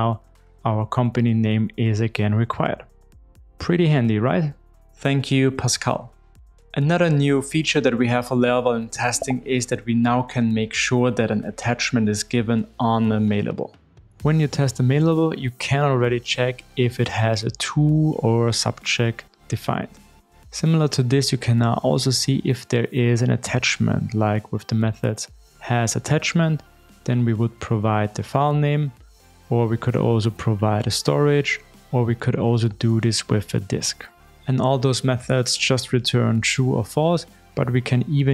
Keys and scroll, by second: 23.4 Return, 27.0 Return, 30.7 alt+Up, 36.0 alt+BackSpace.